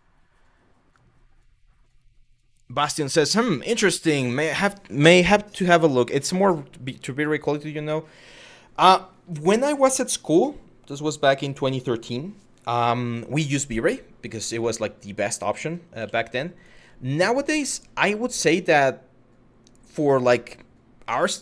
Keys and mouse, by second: 14.4 shift+middle click, 15.6 1, 16.2 click, 17.2 Tab, 17.9-19.5 drag.